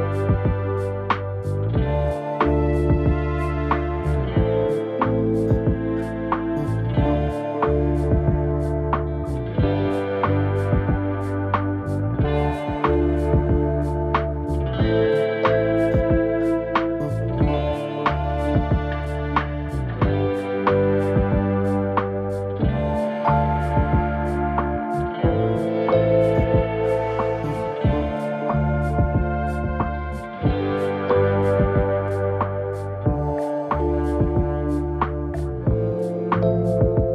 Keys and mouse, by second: 1.7 h, 1.9 right click, 2.4 right click, 2.4 h, 3.8-4.1 middle drag, 5.7-8.1 typing, 6.4 click, 9.0 shift+middle click, 9.5 shift+middle click, 10.1 g, 12.8 shift+middle drag, 14.3 click, 15.3 right click, 15.9 click, 17.2 Tab, 17.4 1, 17.6 a, 17.8 click, 17.8 a, 18.7 shift+middle click, 19.5 g, 21.4 a, 21.6 click, 21.6 a, 22.4 shift+middle click, 23.1 g, 25.1 shift+middle click, 25.8 shift+middle click, 25.8 shift+a, 26.1 click, 26.8 shift+middle click, 27.3 g, 29.4 a, 29.6 click, 29.6 a, 30.5 g, 32.1 z, 32.6 Tab, 32.7 middle drag, 33.4 right click, 33.6 KP_Decimal, 34.6 right click, 34.9 KP_3, 35.1 g, 36.4 shift+middle click, 36.7 z.